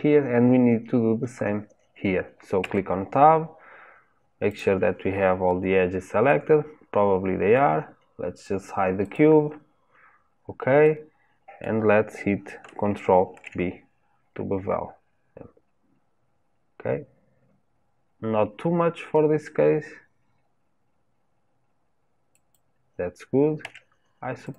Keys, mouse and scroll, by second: 2.6 Tab, 4.5 click, 6.3-9.0 middle drag, 9.0 click, 10.4-10.8 scroll down 1, 10.8 middle click, 11.8-13.3 scroll up 2, 13.3 ctrl+b, 23.6 Tab, 24.4 click.